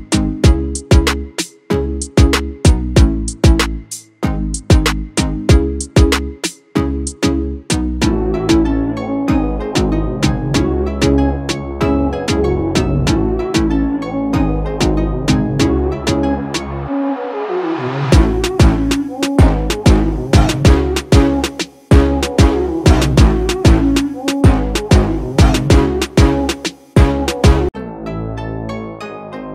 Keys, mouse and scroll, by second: 13.8-23.5 drag, 24.4 ctrl+t, 25.5-29.5 alt+drag.